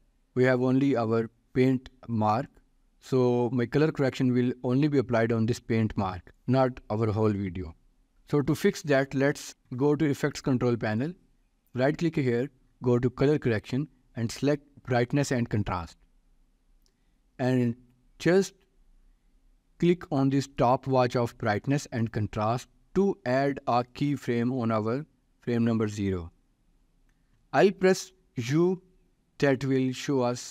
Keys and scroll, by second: 28.8 u.